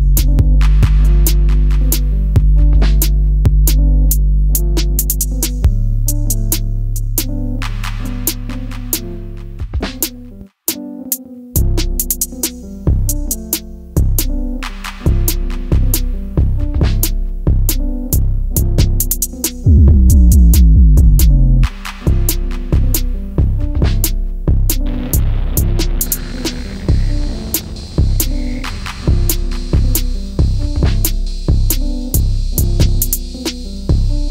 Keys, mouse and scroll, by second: 8.2 Left.